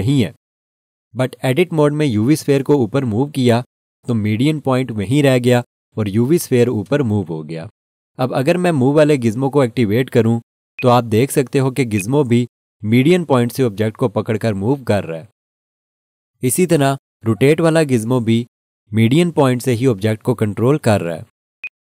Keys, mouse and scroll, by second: 10.7 click, 21.6 right click.